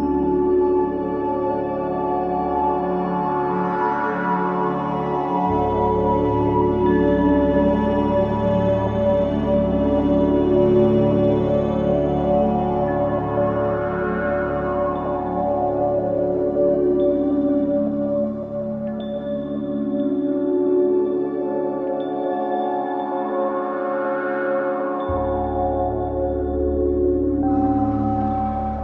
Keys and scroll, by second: 4.1 f, 15.6 F1, 25.2 4.